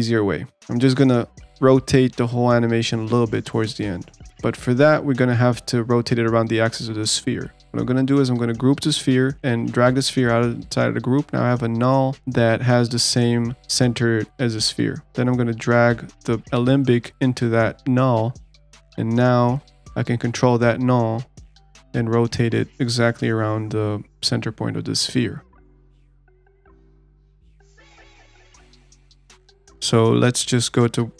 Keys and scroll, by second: 7.3 alt+g.